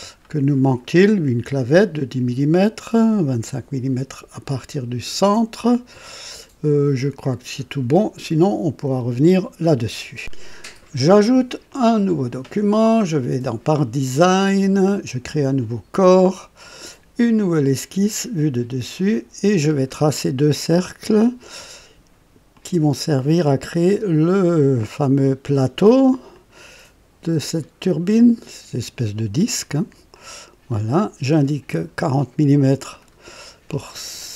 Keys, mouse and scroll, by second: 10.2 click, 11.7 click, 15.4 click, 17.1 click, 18.1 click, 18.9 click, 19.6-20.2 scroll down 2, 20.5 right click, 22.5 click, 24.7 click, 26.3 click, 28.8 click, 30.1 click, 30.7 right click, 31.7 click, 32.9 click.